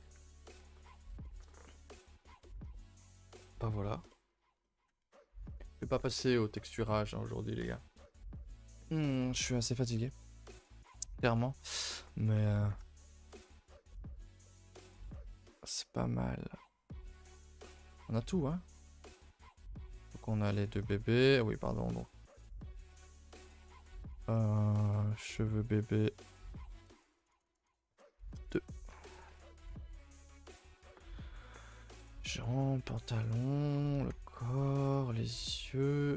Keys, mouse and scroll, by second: 0.0 a, 0.4 middle drag, 0.7 scroll down 2, 0.9-1.4 shift+middle drag, 1.4 scroll down 1, 1.6 middle drag, 1.9 a, 2.0 a, 2.2 middle drag, 2.4 ctrl+s, 2.7 shift+middle click, 3.1 scroll up 1, 3.3-4.3 middle drag, 4.3 a, 4.4 a, 4.6-11.2 middle drag, 11.2 n, 11.7 middle drag, 12.0 a, 12.1 a, 12.3 middle drag, 12.5 ctrl+s, 12.9-13.4 shift+middle drag, 13.6-14.2 shift+middle drag, 14.2 scroll down 1, 14.4-17.9 middle drag, 17.9 KP_0, 18.6 scroll down 2, 19.6 click, 19.8-20.1 scroll up 2, 20.3 click, 20.8 click, 22.3-25.4 drag, 26.2-27.4 drag, 27.4 space, 29.2 a, 30.3 a, 31.1 click, 31.9 click, 33.3 click, 33.7 a, 33.9 a, 34.6 click, 35.4 click.